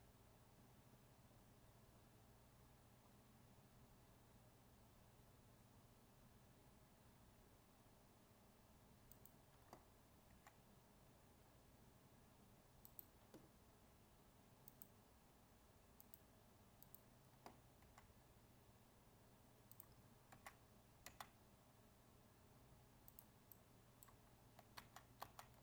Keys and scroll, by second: 24.7 ctrl+z.